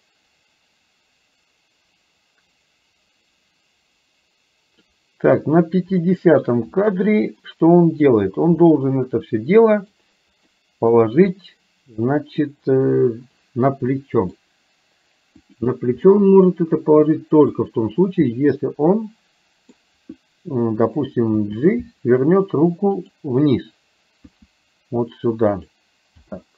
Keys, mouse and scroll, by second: 6.1 shift+middle click, 7.6 middle click, 8.7-9.9 middle drag, 10.6 middle click, 11.4-12.4 middle drag, 14.1 middle click, 16.1-17.6 middle drag, 18.4-19.9 middle drag, 21.4 g, 24.4 r, 26.3 g.